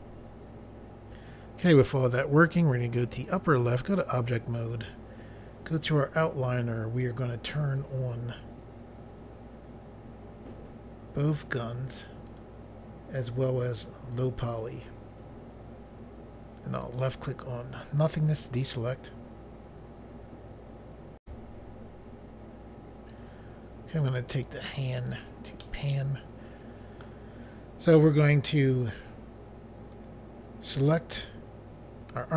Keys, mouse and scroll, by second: 3.1 click, 3.8 click, 11.6 click, 12.3 click, 14.1 click, 16.8 click, 21.2 Pause, 24.4 click, 25.6 middle click, 29.9 click.